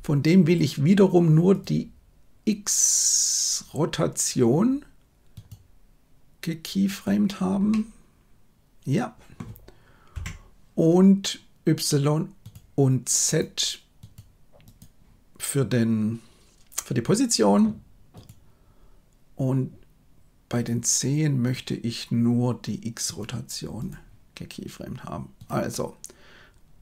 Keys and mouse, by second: 0.4-1.6 drag, 5.4-7.0 right drag, 7.6-9.3 middle drag, 10.1 KP_1, 12.4 right click, 14.1 right click, 18.1 right click, 20.4-21.5 drag, 23.1 right click, 25.3 click.